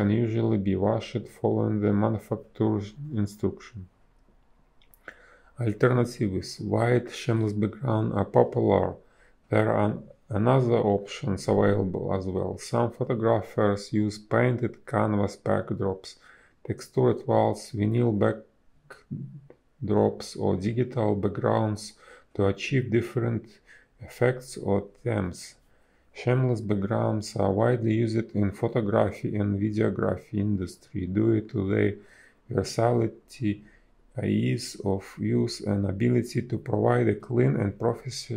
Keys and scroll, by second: 0.0 ctrl+z, 1.8 ctrl+z, 2.3 ctrl+z, 4.2 space, 6.3 a, 9.3 space, 10.1 b, 11.4 space, 16.4 space, 17.1 a, 17.3 space, 20.3 space, 27.2 space, 28.0 space, 30.1 space, 31.6 space.